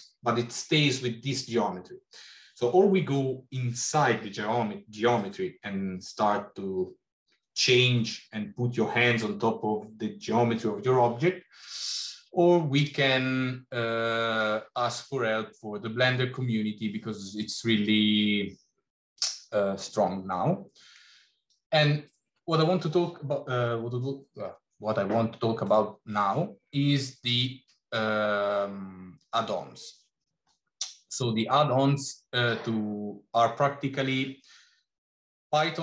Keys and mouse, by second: 19.1-35.8 drag.